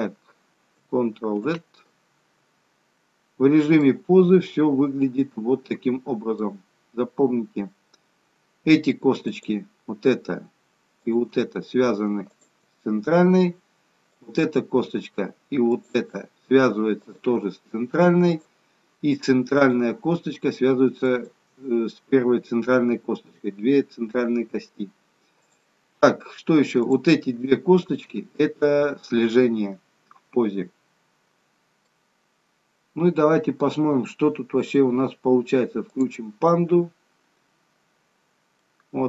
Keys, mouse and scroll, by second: 1.6 ctrl+z, 4.0 middle click, 7.0-7.7 scroll up 3, 7.7-9.4 scroll down 2, 9.4 click, 11.3 shift+click, 12.4 shift+click, 13.2-14.2 scroll down 1, 14.2 click, 14.2-14.9 scroll down 1, 15.8 shift+click, 17.1 click, 18.3 click, 19.6 click, 21.1 shift+click, 23.2-24.1 scroll up 1, 24.1-24.6 scroll up 1, 24.6-25.6 scroll down 1, 25.6 click, 25.6-26.4 scroll down 1, 26.9 click, 28.0 shift+click, 28.7 middle click, 37.3 click, 38.4-38.8 scroll down 2, 38.8 middle click.